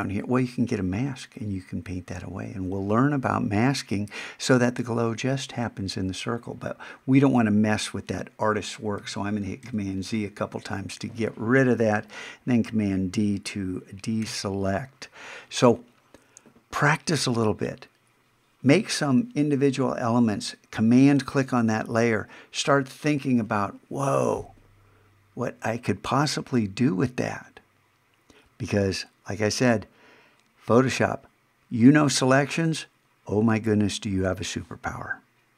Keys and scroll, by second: 9.0 super+z, 14.2 super+d.